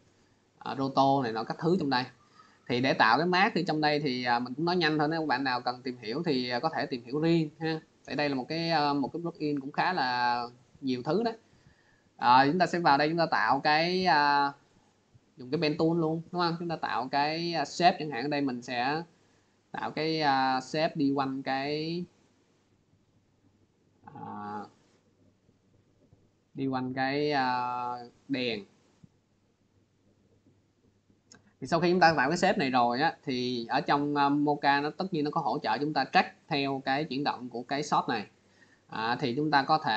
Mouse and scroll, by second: 0.1 middle click, 8.8-13.8 drag, 14.1-16.2 drag, 17.6 click, 19.0 click, 20.5 click, 21.9 click, 22.8 click, 24.2 click, 25.3 click, 28.7 click, 30.7 click.